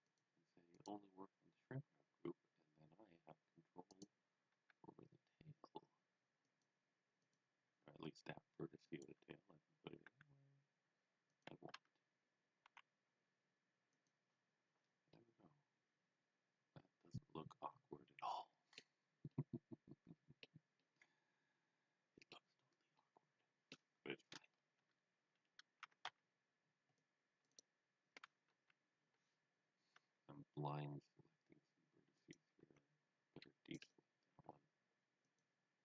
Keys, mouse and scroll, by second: 3.8 click, 4.5 g, 6.4 click, 7.7 g, 8.9 click, 10.1 g, 11.3 click, 11.8 Tab, 12.6 z, 13.9 click, 14.6 scroll down 1, 15.1 middle click, 19.3 middle click, 20.8 middle click, 22.9 middle click, 24.6 scroll up 1, 24.8 Tab, 25.9 a, 26.2-26.7 scroll down 1, 27.0 click, 27.5 right click, 28.4 KP_1, 29.9 g, 32.1 right click, 32.6 c, 33.4 middle click, 33.7 right click, 34.5 z, 35.2 click.